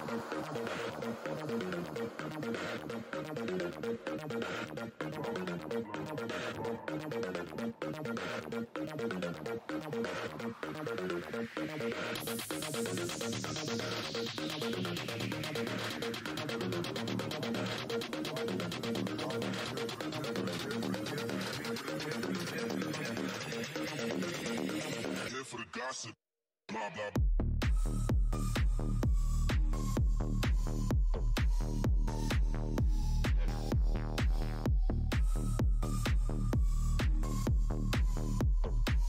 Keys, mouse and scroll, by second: 2.6 alt+click, 2.7 alt+click, 10.5 click, 12.3 Tab, 15.0 Tab, 15.1 Tab, 15.8 Tab, 15.9 Tab, 16.8 Tab, 17.6 scroll down 1, 18.2 alt+Tab, 18.6 alt+Tab, 19.5 Tab, 19.9 Tab, 20.0 click, 21.5 Tab, 21.6 Tab, 21.6 Tab, 21.7 Tab, 22.3 shift+Tab, 22.8 b, 23.8 Tab, 24.4 shift+Tab, 25.0-25.7 typing, 25.9 Tab, 26.5 shift+Tab, 30.3 shift+Tab, 30.6-31.6 typing, 32.0 Tab, 32.9 ctrl+Tab, 33.3 Return, 33.3 ctrl+c, 33.9 Tab, 37.9 right click, 39.0 click.